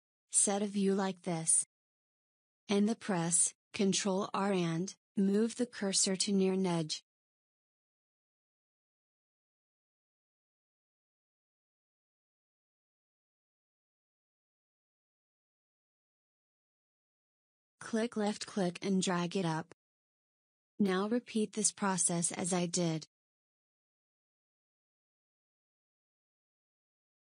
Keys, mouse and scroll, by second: 1.5-4.2 middle drag, 5.8-8.9 scroll up 1, 13.2 ctrl+r, 22.1 ctrl+r, 27.1 ctrl+r.